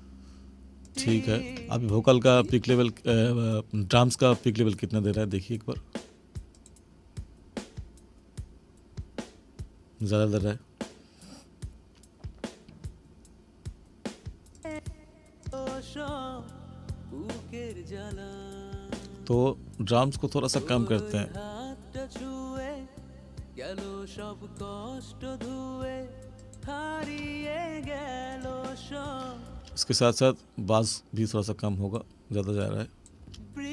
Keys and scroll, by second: 29.5 space, 33.2 space.